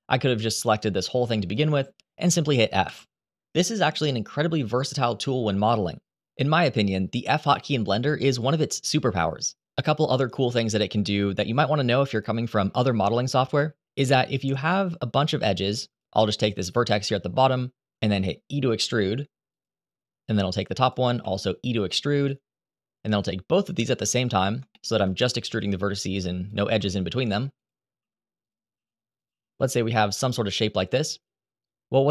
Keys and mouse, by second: 0.6 click, 2.6 f, 13.8 shift+middle click, 15.6 click, 17.8 e, 19.2 click, 20.9 e, 21.9 click, 23.7 shift+click, 24.5 shift+middle click, 25.2 e, 26.2 click, 26.5 e, 27.3 click, 27.7 e, 28.4 r, 29.0 g, 29.8 click.